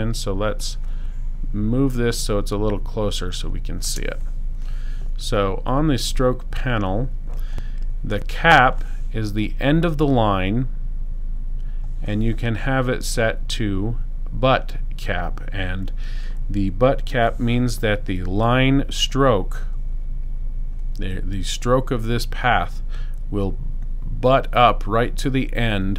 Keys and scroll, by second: 0.1 space.